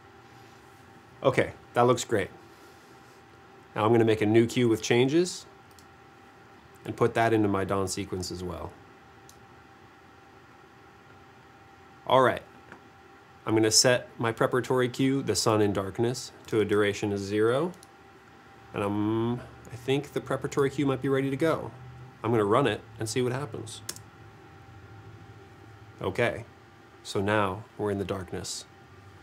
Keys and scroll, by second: 17.5 0, 17.8 Return, 24.0 space.